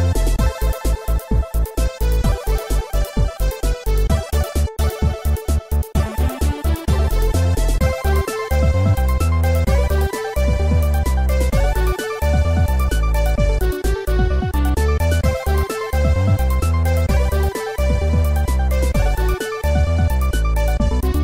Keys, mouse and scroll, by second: 1.7 click, 6.0 click, 6.4 x, 7.1 click, 8.4 scroll up 2, 9.0 ctrl+s, 9.2 click, 11.1 click, 11.4 typing, 12.2 click, 13.2 click, 13.5 typing, 14.4 click, 15.4 click, 16.2 click, 16.9 ctrl+s, 17.5 scroll down 2, 20.0-21.2 typing.